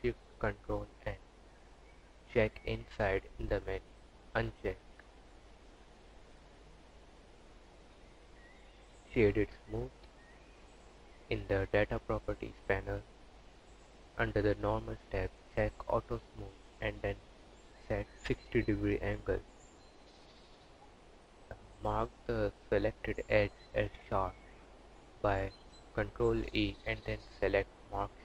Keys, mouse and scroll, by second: 1.0 click, 2.3 Tab, 3.6 click, 7.3 click, 8.0 right click, 11.4 click, 13.0 click, 13.5 click, 15.4 click, 16.4 click, 19.1 Tab, 19.6 2, 20.1 alt+click, 24.1 ctrl+e, 27.0 click, 27.3 Tab, 27.6 click.